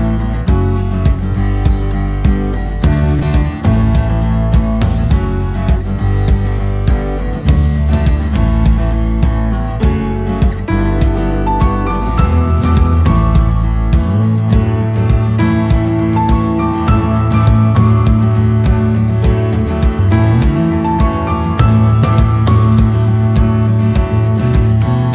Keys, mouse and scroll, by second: 2.3 click, 2.4 click, 2.6 click, 3.1 click, 4.0 click, 4.1 click, 4.4 right click, 5.3 s, 6.6 click, 6.8 click, 7.6 s, 8.9 shift+click, 9.2 shift+click, 10.0 s, 11.4 click, 11.8 click, 11.9 click, 12.4 ctrl+b, 15.1 click, 15.2 click, 15.5 scroll up 2, 16.1 click, 16.9 click, 20.0 click, 20.9 g, 23.6 click, 24.0 click, 24.8 g.